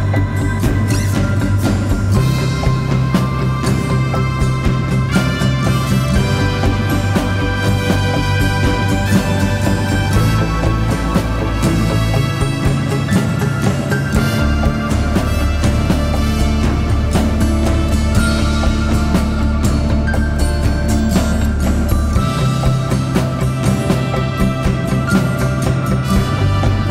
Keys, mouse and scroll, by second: 4.0-5.9 scroll down 1, 9.3-10.2 scroll down 1, 13.3 click, 13.8 scroll down 1, 14.1-16.0 typing, 14.3 click, 15.7 click, 18.3-19.2 scroll down 1, 19.2 click, 19.7 right click, 20.6-26.9 drag.